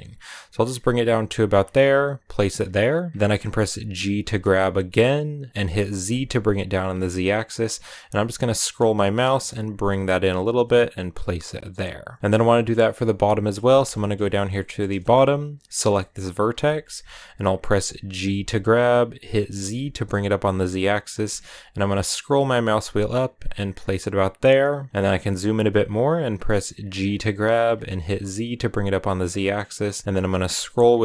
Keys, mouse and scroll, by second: 3.1 scroll up 1, 3.9 g, 11.2-11.6 scroll down 3, 11.6-15.1 middle drag, 15.1-15.7 scroll up 2, 15.7 right click, 15.9-18.0 middle drag, 18.0 g, 24.9 middle click, 25.1-25.5 scroll up 2, 26.6 g.